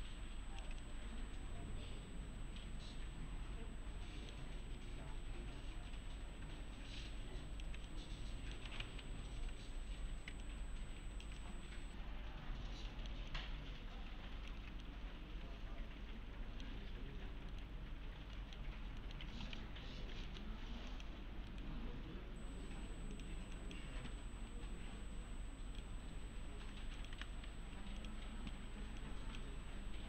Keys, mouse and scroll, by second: 0.8-4.6 middle click, 7.0-7.7 alt+click, 7.9-8.8 middle click, 8.9 ctrl+z, 10.4-11.4 alt+click, 11.4-13.3 middle click, 13.3-14.5 alt+click, 14.8-16.7 middle click, 17.5 right click, 18.1 scroll down 1, 18.4 middle click, 18.7 scroll down 1, 19.0 middle click, 19.3 l, 19.6 z, 20.0 scroll down 1, 20.3 middle click, 20.9 click, 21.5 right click, 23.1 click, 27.0 click, 27.1 e, 28.0 click, 28.7 1, 29.0-29.6 click.